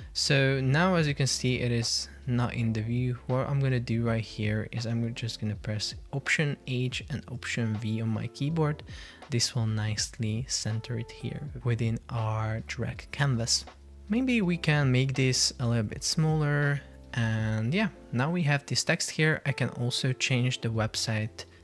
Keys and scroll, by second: 18.0 Down.